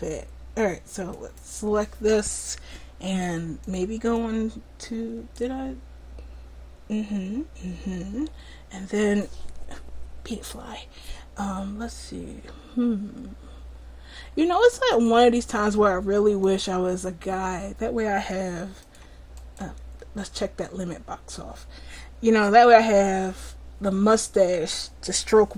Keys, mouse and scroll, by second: 1.2-2.3 right drag, 4.4-5.4 drag, 8.4 middle click, 9.0-14.4 drag, 15.0-25.5 drag.